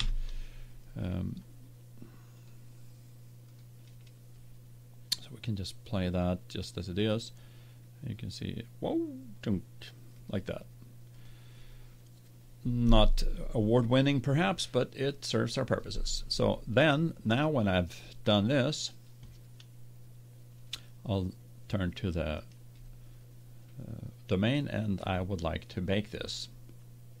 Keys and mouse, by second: 6.1-7.1 drag, 10.1-13.3 drag, 22.3-24.0 drag.